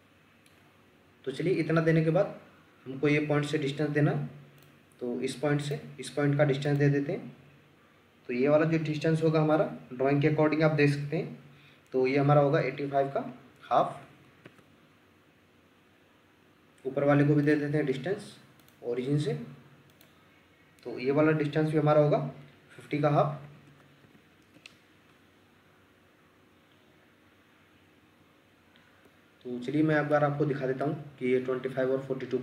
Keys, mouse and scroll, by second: 1.4-1.7 scroll down 1, 12.4 typing, 13.8-14.2 typing, 14.4 Return, 16.2 scroll up 1, 23.4-24.4 typing, 24.5 Return, 28.8-29.2 scroll down 1, 30.1 ctrl+middle click, 31.2-31.6 ctrl+scroll up 1.